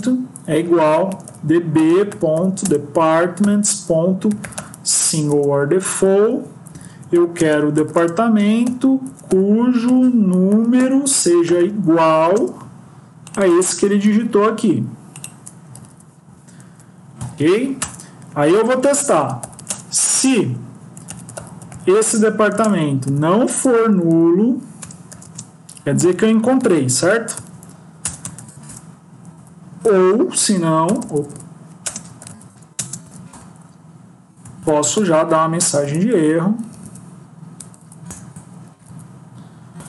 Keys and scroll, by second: 2.5 Return, 5.2 Return, 6.8 Left, 8.9 BackSpace, 10.4 Down, 10.7 Return, 13.9 ctrl+c, 15.7 ctrl+v, 16.5 End, 20.8 Left, 24.7 BackSpace, 27.2 End, 29.2 Down, 30.2 BackSpace, 35.7 Return, 37.6 Down, 37.9 Return.